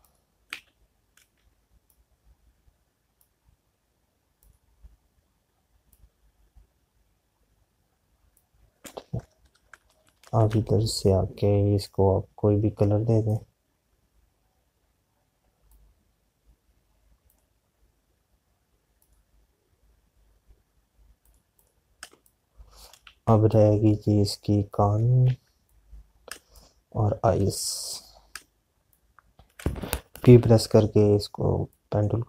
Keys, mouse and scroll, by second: 0.9 click, 15.4 click, 24.0 z, 25.9 click, 26.1 z, 28.3 space, 31.3 p.